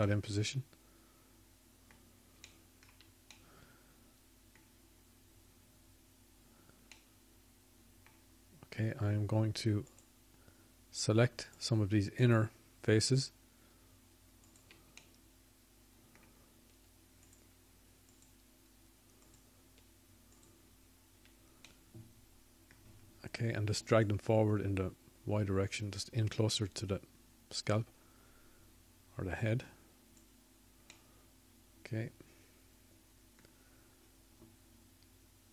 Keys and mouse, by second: 5.1-6.3 drag, 9.3-10.9 middle drag, 12.9-15.1 middle drag, 20.3 click, 25.5 shift+click, 26.5 shift+click.